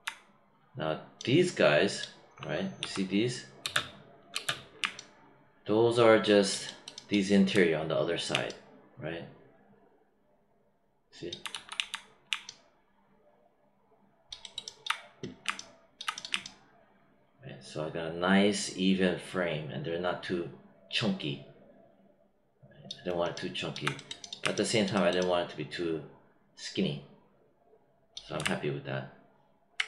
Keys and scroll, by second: 2.7 w, 3.6 space, 11.5 q.